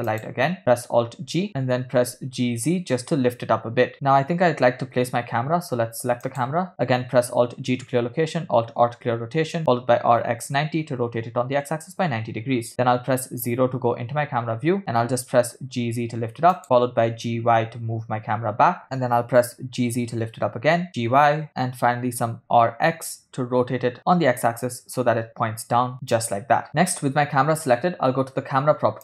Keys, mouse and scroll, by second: 0.6 middle click, 0.6 click, 1.5 alt+g, 4.7 middle click, 6.7 click, 7.9 alt+g, 9.2 alt+r, 10.2 r, 13.2 KP_0, 15.1 g, 15.5 click, 16.8 g, 19.5 g, 21.3 g, 22.5 r.